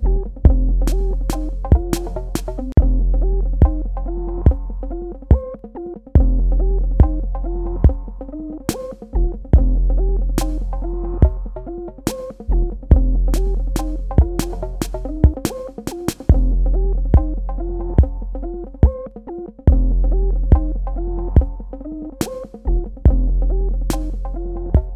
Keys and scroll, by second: 2.7 g, 24.6 space.